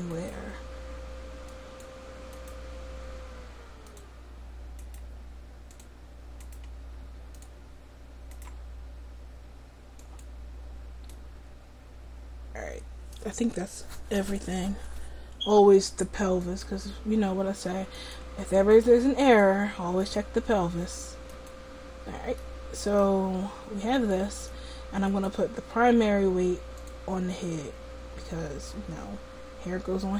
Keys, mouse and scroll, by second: 0.4-1.5 right drag, 2.1 right click, 10.1-11.2 right drag, 11.2 middle click, 14.5-17.4 right drag, 17.4 middle click, 18.2-22.1 right drag, 22.1-30.1 middle drag.